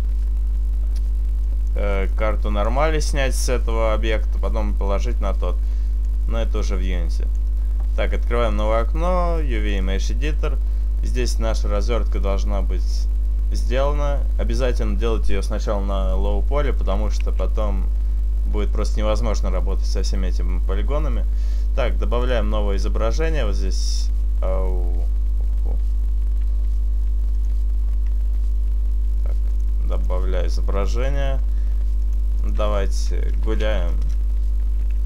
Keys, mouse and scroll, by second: 1.4 click, 2.3 click, 6.0 click.